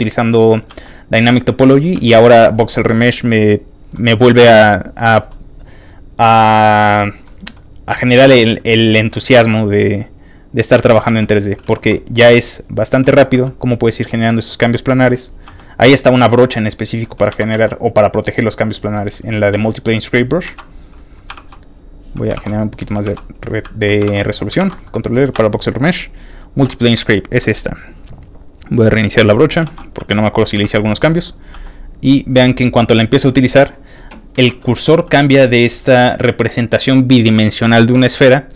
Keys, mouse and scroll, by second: 0.0 middle click, 0.7 f, 0.8 click, 1.0 click, 1.2 click, 1.5 middle click, 1.9 f, 2.0 click, 2.2 click, 2.3 click, 2.6 middle click, 3.1 click, 3.4 click, 3.6 click, 3.9 middle click, 4.3 f, 4.4 click, 4.6 click, 4.9 middle click, 6.9 middle click, 7.4 middle click, 7.6 scroll up 1, 8.1 click, 8.4 click, 8.6 click, 9.0 middle click, 9.3 shift+middle click, 9.8 click, 10.1 click, 10.3 click, 10.5 click, 11.1 f, 11.2 click, 11.4 click, 11.6 shift+middle click, 11.6 shift+scroll up 1, 12.0 click, 12.2 click, 12.7 click, 13.0 middle click, 13.0 shift+scroll up 1, 13.4 click, 13.6 click, 13.9 click, 14.3 middle click, 14.7 shift+click, 15.0 shift+middle click, 15.5 click, 15.5 shift+f, 15.8 click, 16.2 middle click, 16.5 click, 17.0 middle click, 17.3 ctrl+z, 17.5 f, 17.6 ctrl+click, 18.0 ctrl+click, 18.4 ctrl+click, 18.7 ctrl+click, 18.9 ctrl+middle click, 19.1 scroll up 1, 19.5 f, 19.6 click, 19.8 click, 20.4 ctrl+z, 20.7 click, 21.3 shift+r, 21.9 click, 22.3 shift+r, 22.6 click, 23.0 shift+r, 23.3 shift+click, 24.0 shift+r, 24.3 ctrl+shift+click, 24.6 ctrl+r, 24.8 ctrl+middle click, 25.3 shift+space, 26.9 ctrl+shift+middle click, 28.0 shift+click, 28.0 middle click, 28.6 click, 29.3 middle click, 29.6 shift+f, 29.8 click, 30.4 click, 30.6 shift+f, 30.9 shift+click, 31.2 shift+middle click, 31.5 f, 31.6 shift+click, 32.0-33.7 drag, 34.3 ctrl+z, 34.6 middle click, 34.9 f, 35.1 click.